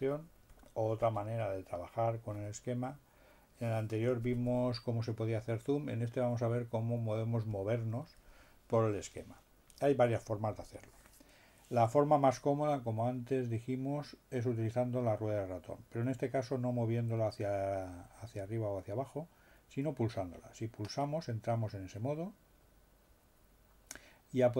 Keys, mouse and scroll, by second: 21.1 middle click.